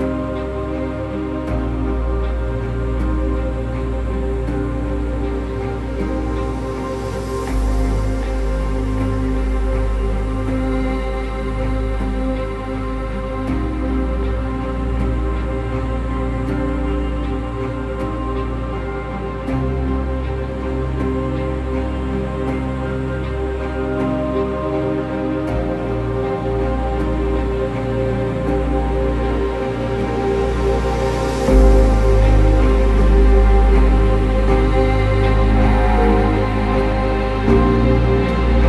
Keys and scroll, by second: 13.3 ctrl+-, 13.5 ctrl+-, 13.8 ctrl+-, 22.4 ctrl+-, 31.0 ctrl+alt+shift+e.